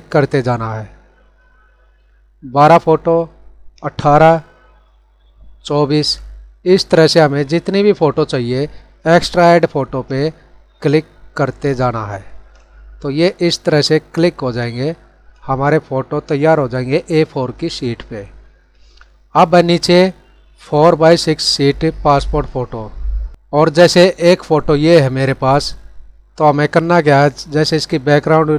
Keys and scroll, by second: 6.7 ctrl+-.